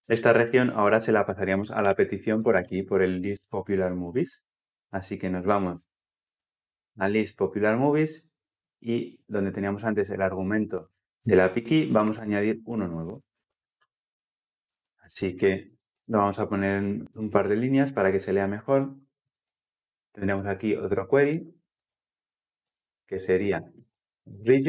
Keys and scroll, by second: 2.9 Escape, 6.1 Escape, 6.2 ctrl+b, 22.5 Return.